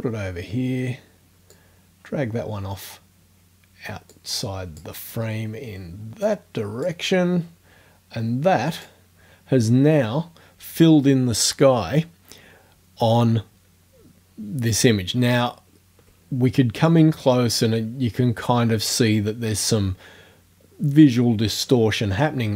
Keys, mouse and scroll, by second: 1.6-3.0 drag, 4.1-5.0 drag, 6.3-7.1 drag, 8.8 click, 15.1-15.8 ctrl+scroll up 4, 17.0-17.4 drag.